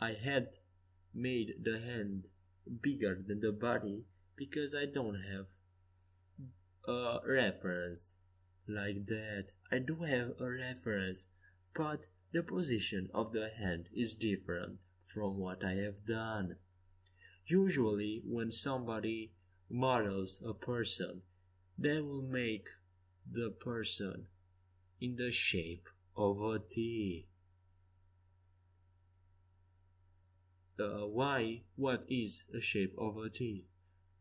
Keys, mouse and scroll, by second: 2.5 c, 5.4 g, 7.6 a, 10.4 z, 15.1 ctrl+z, 15.7 ctrl+z, 17.1 a, 18.5 middle click, 18.7 middle click, 18.9 middle click, 23.7 a, 24.3 a, 24.7 c, 28.6 r, 30.5 a, 30.9 z, 31.9 c.